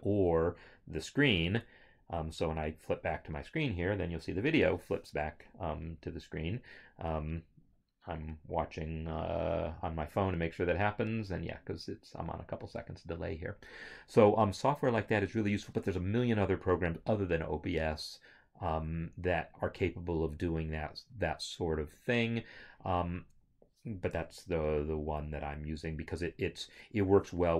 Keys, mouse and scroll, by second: 1.6 alt+Tab.